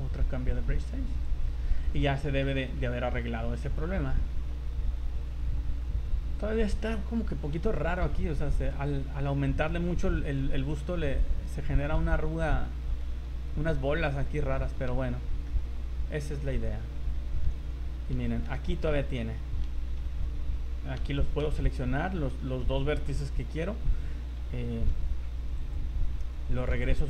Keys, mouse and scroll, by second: 1.9 middle click, 2.8 middle click, 3.6 middle click, 7.0 scroll up 2, 7.7 shift+middle click, 8.7 middle click, 9.8 scroll down 3, 10.1 shift+middle click, 10.6 middle click, 11.5 scroll up 1, 12.0 shift+middle click, 12.7 shift+middle click, 13.0 middle click, 13.6-14.0 scroll up 3, 14.4 scroll down 2, 14.5 shift+middle click, 15.0 z, 15.4 middle click, 16.6 right click, 16.9 middle click, 17.5 z, 17.9-18.3 scroll up 4, 18.1 z, 18.7 shift+middle click, 20.0 k, 21.0 v, 21.2 right click, 21.6 shift+right click, 24.9 v, 25.6 click, 26.7 v.